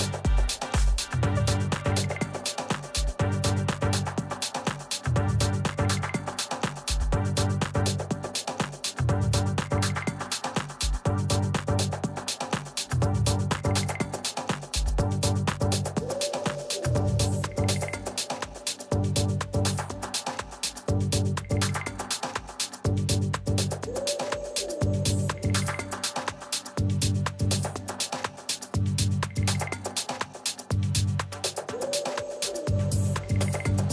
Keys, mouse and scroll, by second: 0.1 KP_7, 1.7 middle click, 2.6 a, 4.3-5.9 right drag, 5.0 middle click, 6.0 z, 6.2-8.9 middle drag, 8.9-10.9 drag, 12.0 a, 12.8-14.7 right drag, 13.8-15.7 drag, 15.8-19.0 middle drag, 17.6 a, 19.8-21.7 right drag, 22.1-23.8 drag, 23.8-25.3 middle drag, 25.3 a, 25.9-27.9 middle drag, 27.9 right click, 28.5-29.9 middle drag, 30.6 KP_7, 32.0-33.9 middle drag.